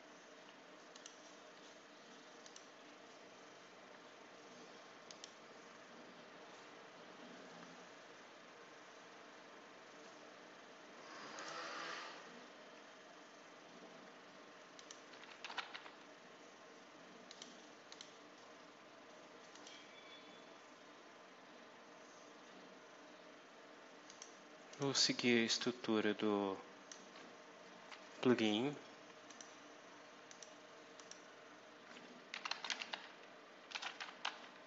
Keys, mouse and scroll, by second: 0.8 click, 2.3 click, 5.0 click, 6.5 scroll down 2, 7.2 scroll down 2, 11.2 click, 13.9 scroll down 2, 14.6 click, 15.1-16.1 typing, 17.2 click, 17.8 click, 19.4 click, 24.0 click, 24.6 click, 25.4-27.0 drag, 27.0 scroll up 2, 29.2 click, 30.2 click, 30.8 click, 32.0-34.6 typing.